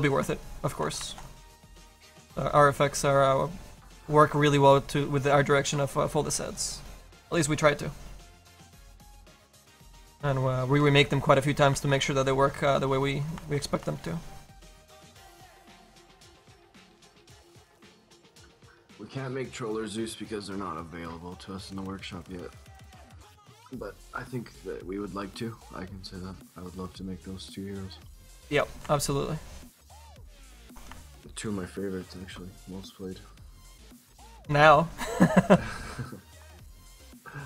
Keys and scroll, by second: 1.0 ctrl+z, 17.4 ctrl+z, 18.9 ctrl+z, 26.3 ctrl+z.